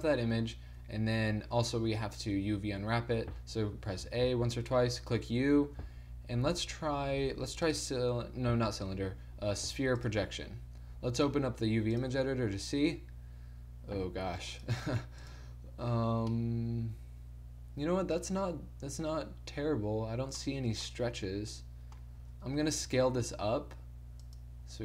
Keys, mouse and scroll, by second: 2.5 Tab, 3.9 a, 4.2 a, 4.9 u, 8.9 u, 11.2-12.8 drag, 12.8 middle click, 14.6 click, 16.5 Tab, 16.5 middle click, 18.9 middle click, 20.5 middle click, 22.4 Tab, 23.0 s.